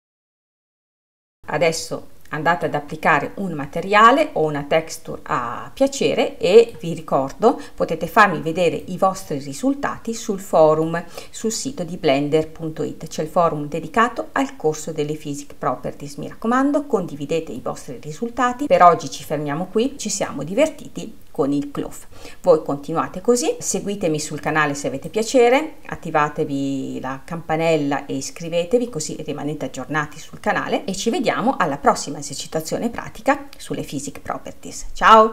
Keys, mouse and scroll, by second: 0.0 scroll up 1, 0.7-1.0 scroll, 1.4-9.4 middle drag, 9.4-11.5 drag, 11.5-19.0 middle drag, 19.9-21.0 middle drag, 25.1-28.2 drag.